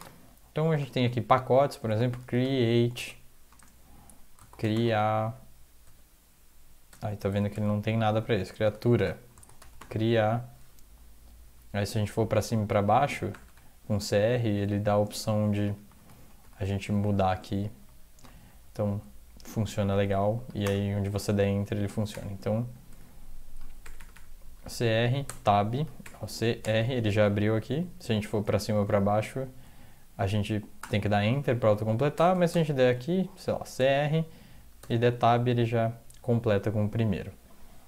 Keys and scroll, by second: 0.3 Down, 0.7 Return, 1.6-2.4 typing, 2.9 Tab, 3.5 Return, 4.4-4.8 typing, 5.8 Tab, 6.9 Tab, 7.3 Tab, 7.5 Tab, 7.9-10.0 typing, 9.0 Return, 10.8 Down, 11.4 Down, 11.8 Up, 11.8-16.4 typing, 14.3 Down, 15.3 Down, 15.6 Up, 16.6 Down, 16.8 Up, 17.0 Down, 17.3 Up, 17.8 Down, 17.8-18.9 typing, 18.2 Up, 18.9 Escape, 20.0 Tab, 20.6 Return, 20.8 typing, 22.1 typing, 22.9 Tab, 23.3-24.1 typing, 25.3-26.6 typing, 28.5 Down, 28.9 Up, 29.2 Down, 29.6 Up, 30.0 Down, 30.8 Return, 31.4-32.3 typing, 32.5 Tab, 33.6 typing, 34.8 Tab, 34.9 typing.